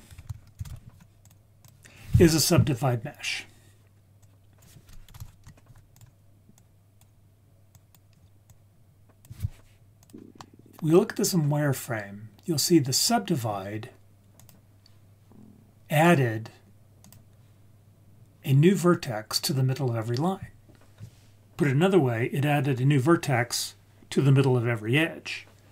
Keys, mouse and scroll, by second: 0.1 shift+a, 2.9-4.0 scroll down 1, 4.2-5.7 drag, 6.5-7.0 drag, 7.7 click, 8.4-9.2 drag, 10.0 click, 10.3-10.8 middle drag, 12.5-12.9 scroll down 2, 12.9-13.3 scroll up 3, 14.3 click, 17.0 click.